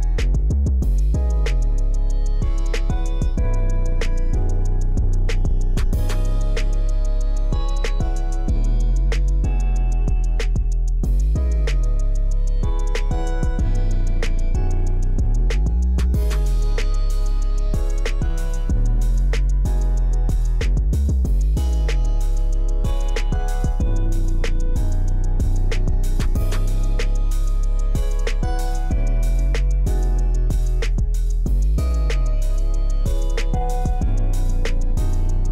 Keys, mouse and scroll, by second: 0.8 click, 1.7 KP_0, 1.9 KP_5, 2.1 Return, 4.2 click, 5.0 KP_0, 5.2 KP_6, 5.5 Return, 6.4-8.1 middle drag, 9.4 Escape, 9.7 middle drag, 10.3 middle click, 10.7-11.2 middle drag, 11.8-12.6 middle drag, 11.8-12.4 scroll up 1, 14.0 click, 15.3 middle click, 16.5 click, 18.6 middle click, 19.2 middle click, 19.5-23.0 middle drag, 24.8-25.7 scroll down 1, 26.4 click, 28.9-29.6 scroll down 1, 29.6-30.2 scroll up 1, 31.4-35.5 scroll down 1.